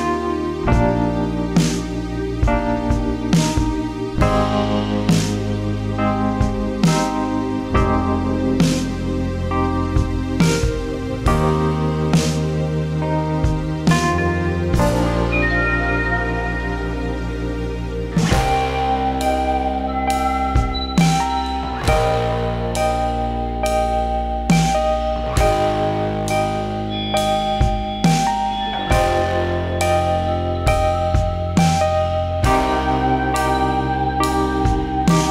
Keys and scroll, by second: 8.5 ctrl+z, 8.9 ctrl+z, 12.4 ctrl+z, 34.7-35.3 typing.